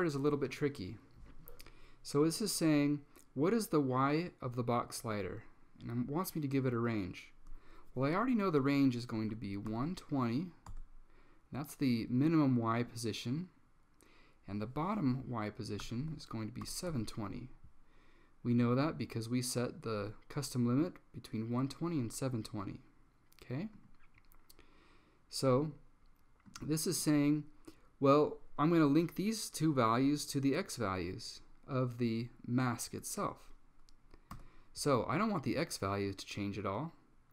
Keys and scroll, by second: 9.0-10.3 typing, 10.8 Tab, 15.7-16.7 typing, 17.0 Tab, 34.4 0.